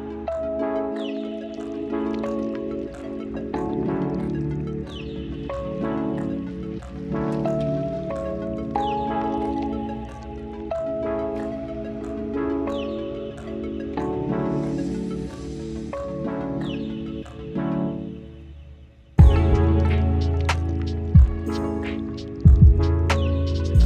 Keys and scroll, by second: 2.4 ctrl+l, 12.4 ctrl+z, 21.7 ctrl+alt+z.